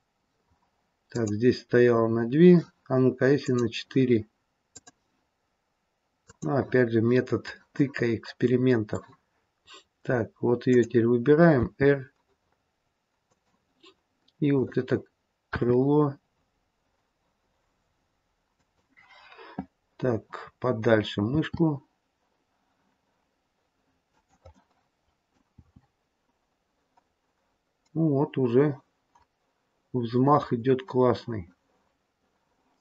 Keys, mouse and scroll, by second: 3.3 click, 4.6 click, 7.6 middle click, 10.6 click, 11.5 r, 14.4 click, 15.5 r, 21.3 r, 24.5 middle click, 25.5 r.